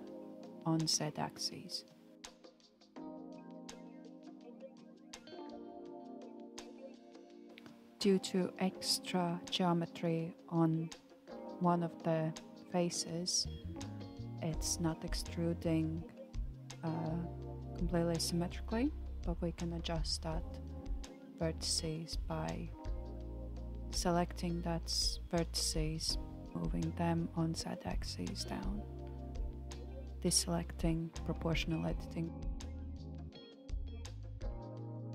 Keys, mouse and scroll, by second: 2.8-5.6 drag, 7.2 g, 24.0-25.7 middle drag, 25.7 alt+z, 26.4-29.8 shift+middle drag, 31.2 alt+z, 31.9-33.4 middle drag, 33.4 click, 34.1-35.1 middle drag.